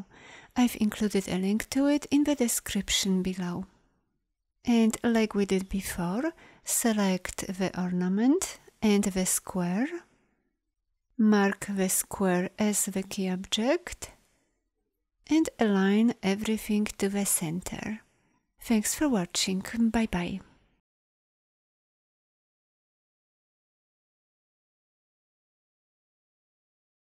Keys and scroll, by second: 0.1-4.1 typing, 0.3 ctrl+h, 4.2 ctrl+d.